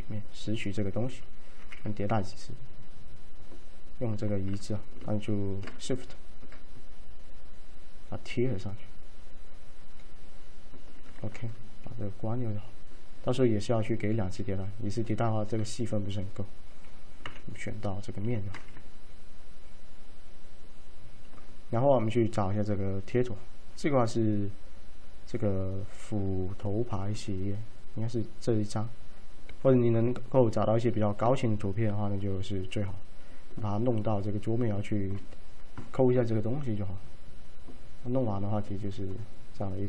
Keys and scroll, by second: 1.7 z, 17.3 F3, 18.3 typing, 23.4 F3.